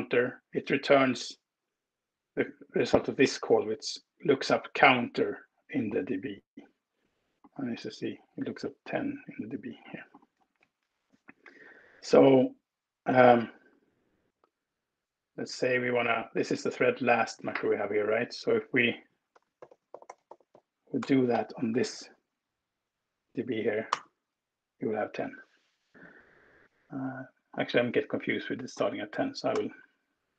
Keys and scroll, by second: 16.4 Left, 16.8 Return, 18.8-21.7 typing, 22.6 Escape, 23.8 alt+Return, 29.4 BackSpace.